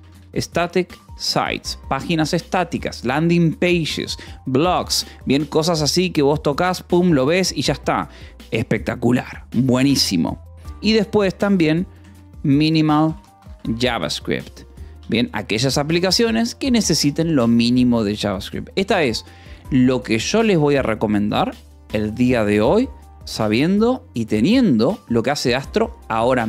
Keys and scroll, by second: 0.0-2.7 typing, 12.2-15.9 typing, 17.3-18.2 typing.